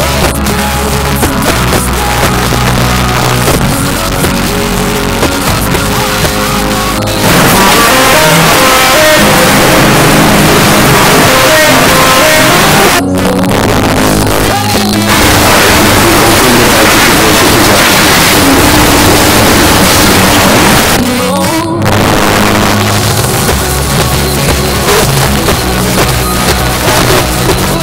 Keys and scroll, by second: 12.9 Page_Down, 20.8 Page_Down.